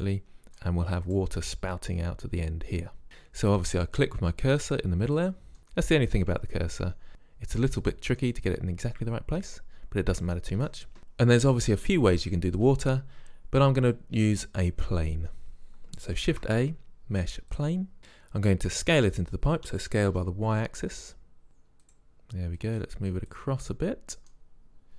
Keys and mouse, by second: 0.2-0.8 drag, 1.2-2.0 drag, 2.9-3.6 middle drag, 3.6-4.9 drag, 4.9 middle drag, 5.2 click, 5.6 middle drag, 16.3 shift+a, 19.7 s, 22.6-23.8 drag, 23.8-24.4 middle drag, 24.4 drag, 24.6-24.9 middle drag.